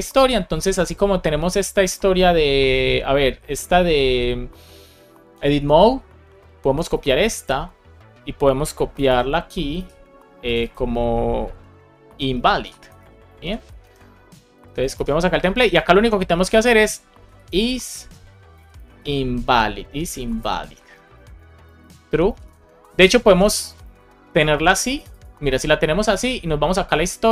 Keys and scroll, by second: 6.8 super+c, 8.9 Return, 9.7 super+v, 12.0 shift+\, 13.3 alt+shift+Left, 13.7 super+c, 14.8 super+v, 18.5 shift+i, 20.8 Right, 21.6 Left, 21.8 shift+super+Right, 22.2 shift+Left, 22.7 shift+Right, 23.7 super+s.